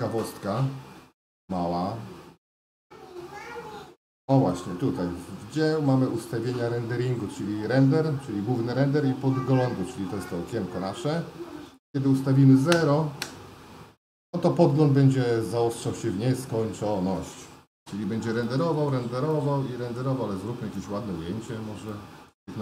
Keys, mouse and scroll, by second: 12.9-14.9 drag, 21.9 middle click.